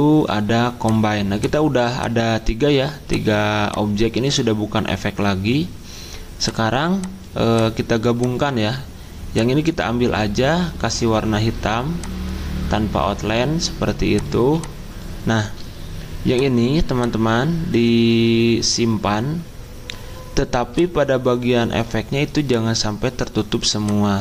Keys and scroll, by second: 14.4 z.